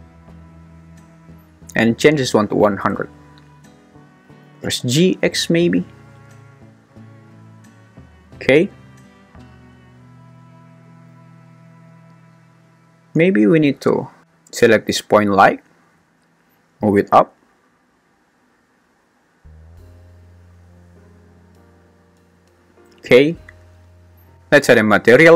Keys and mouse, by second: 2.0 click, 2.6 0, 4.4 g, 4.8 x, 16.8 g, 17.1 z.